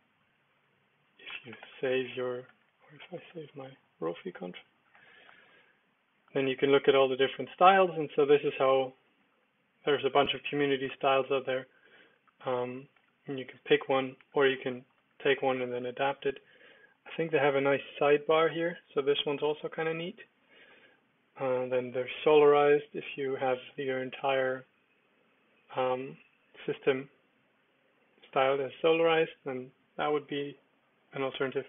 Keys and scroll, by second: 1.1-2.0 typing, 2.5 super+l, 2.8 Up, 3.1 Return, 4.9 Down, 5.2 Return, 5.9 Down, 6.2 Return, 6.6 Down, 6.8 Return, 7.1 Down, 7.4 Return, 7.8 Down, 8.1 Return, 8.4 Down, 8.7 Return, 9.0 Down, 9.3 Return, 9.7 Down, 9.9 Down, 10.2 Return, 10.6 Down, 10.8 Return, 11.1 Down, 12.1 Return, 12.7 Down, 13.0 Return, 13.3 Down, 13.8 Down, 14.2 Return, 14.5 Down, 15.0 Return, 15.4 Down, 15.7 Return, 16.2 Down, 16.7 Down, 16.9 Down, 17.5 Up, 17.8 Down, 18.0 Return, 20.4 Down, 20.7 Return, 22.4 Down, 22.9 Return, 24.1 Up, 27.5 shift+Up, 31.1 Return.